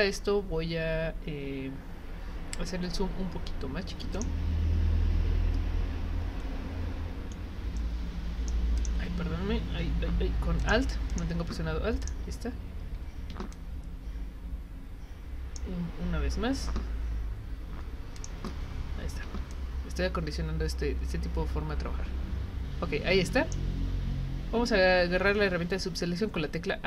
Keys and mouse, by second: 4.1 click, 7.9 right click, 8.8 click, 10.6 click, 11.1 click, 12.0 click, 13.5-15.6 drag, 18.2 click, 19.5-23.5 drag.